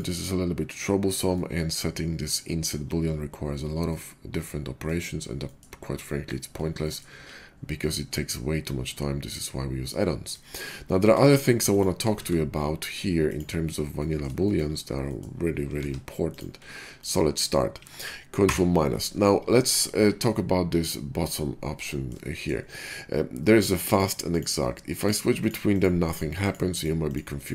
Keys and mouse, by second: 0.0-9.2 middle drag, 9.2-10.0 drag, 10.9 a, 11.2 x, 12.1 shift+a, 15.7 shift+d, 18.3 ctrl+KP_Subtract, 23.8 click, 24.2 click, 24.4-24.9 middle drag, 24.9 click, 25.0-25.3 middle drag, 25.3 click, 25.5 middle click, 25.7 click, 25.8 middle drag, 26.0 click, 26.1 middle drag, 26.3-26.8 drag, 26.8 middle click, 26.9 click, 27.2 middle click, 27.3 click, 27.4-27.5 middle drag.